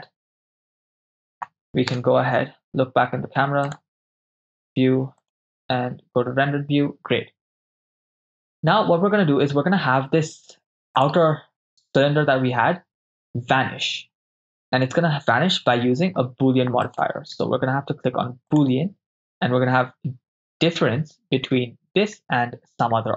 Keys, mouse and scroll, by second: 2.0 KP_0, 3.7-5.0 drag, 8.5 click, 11.1 click, 13.2 right click, 16.9-18.7 drag.